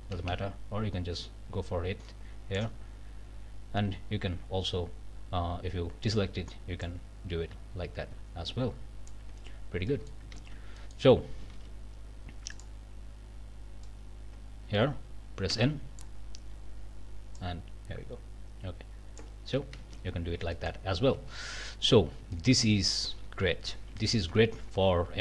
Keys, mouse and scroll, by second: 0.0 BackSpace, 6.8-9.3 drag, 9.9 click, 10.3 ctrl+z, 10.8 ctrl+click, 11.5 alt+a, 12.5 click, 13.8-16.2 drag, 15.5 n, 17.4-19.4 drag, 19.8 ctrl+z, 20.4 ctrl+scroll down 1, 20.5 middle click, 21.0 alt+a, 21.2 alt+scroll up 1, 21.5 alt+middle click, 22.0 scroll down 3, 22.3 shift+middle click, 23.5 scroll up 2, 24.0 shift+middle click, 24.3-24.6 shift+scroll down 2, 24.7 a.